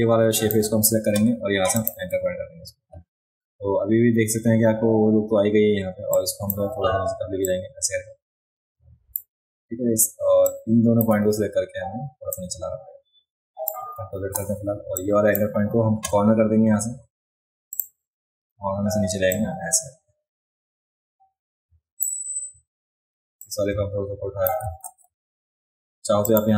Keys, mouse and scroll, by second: 1.8 click, 6.1-6.5 drag, 7.5-9.2 drag, 10.5-11.0 drag, 12.3-13.7 drag, 14.2 ctrl+z, 15.0-15.4 drag, 17.7 click, 19.3-22.0 drag, 23.4-24.5 drag, 24.9 ctrl+z, 26.3 click.